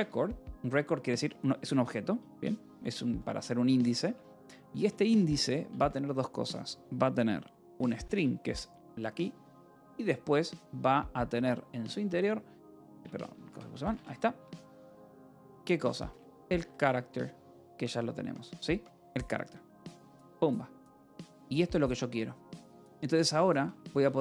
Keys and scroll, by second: 0.0-0.4 typing, 3.3 [, 3.9 BackSpace, 5.1 BackSpace, 6.0 Left, 7.2-9.0 typing, 9.3 Down, 11.7 Return, 12.6-17.3 typing, 18.8 Return, 20.2 Escape, 21.6 ctrl+s, 22.9 j, 24.0-24.2 typing.